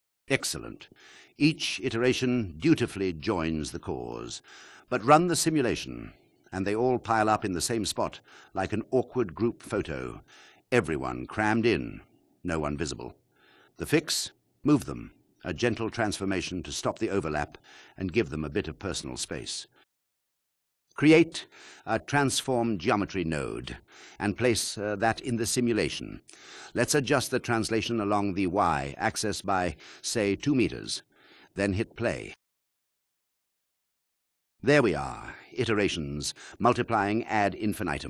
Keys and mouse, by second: 10.5 click, 14.2 click, 17.2 shift+click, 17.9 click, 21.6 shift+a, 24.7-28.6 drag, 32.0 click, 33.5 drag.